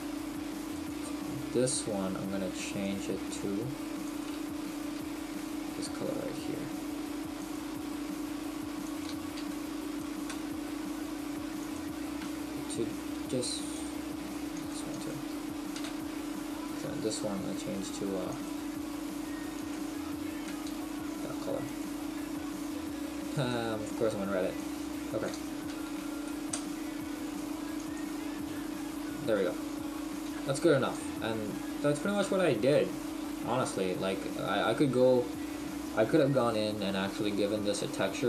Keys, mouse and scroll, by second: 12.5 shift+middle click, 14.0 click, 28.9 middle click, 29.7 scroll down 1, 30.2-36.4 scroll down 3, 37.3 middle click.